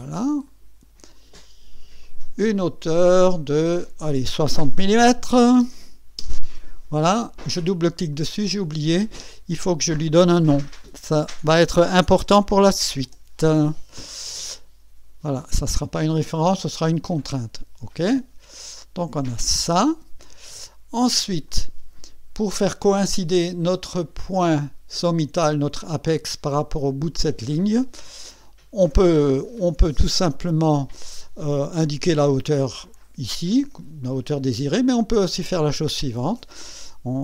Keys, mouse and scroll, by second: 0.5 click, 2.0 click, 5.4 KP_6, 5.6 KP_0, 6.2 KP_Enter, 8.1 click, 9.7 click, 11.5 h, 12.1 a, 12.4 u, 17.0 click, 18.8-20.0 drag, 21.5 click, 22.6-23.5 drag, 23.6-24.3 drag, 28.2 click, 30.7 click, 31.4 click, 35.3 click.